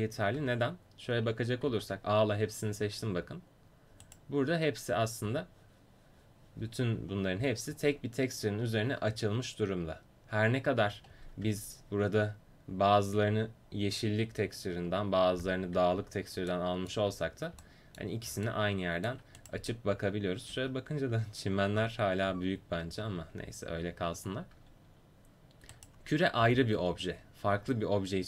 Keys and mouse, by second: 0.6 Tab, 1.8 a, 4.2 right click, 5.0 a, 5.3 a, 7.0 a, 7.5 a, 11.6 Tab, 11.6 a, 15.5-17.0 middle drag, 17.2 middle click, 20.7 Tab, 21.3 Tab, 25.8 right click, 26.5 g.